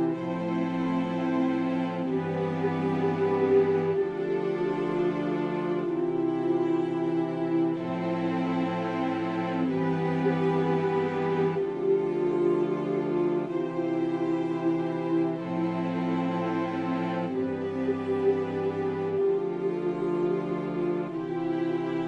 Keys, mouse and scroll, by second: 5.8-11.4 typing, 7.2 Return, 12.8 Return, 13.4-14.5 typing, 15.8-19.4 drag, 19.4 right click, 19.6-22.0 drag.